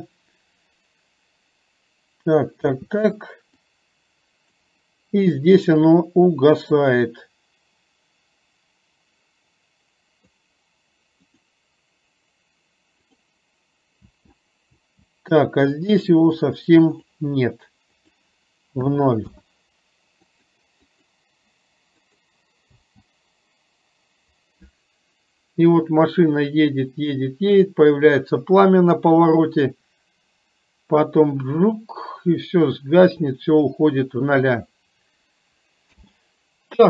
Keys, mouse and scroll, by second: 2.9 space, 3.9 click, 5.7-10.5 drag, 14.1 space, 14.9 space, 16.0 click, 16.4 click, 18.0-19.4 drag, 20.4 click, 20.9 click, 22.1 click, 22.9 space, 36.0 space.